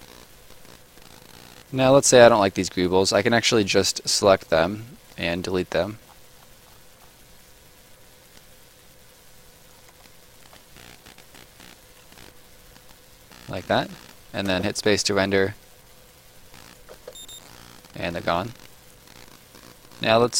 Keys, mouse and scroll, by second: 2.5 click, 3.6-5.0 scroll down 1, 5.0 click, 5.7-8.3 scroll up 1, 8.3 click, 9.9 shift+click, 12.1-12.7 scroll down 1, 12.7-13.3 scroll down 1, 14.5 space, 16.5 right click, 16.9 space, 17.3 right click.